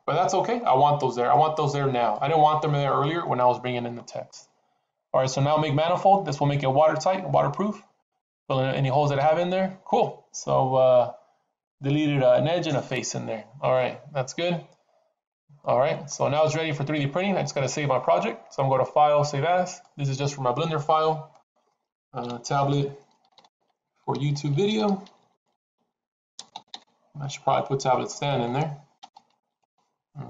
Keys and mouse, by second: 1.0 middle click, 1.5 Tab, 2.0-2.4 middle drag, 8.1 click, 12.7-16.0 middle drag, 18.8-19.8 drag.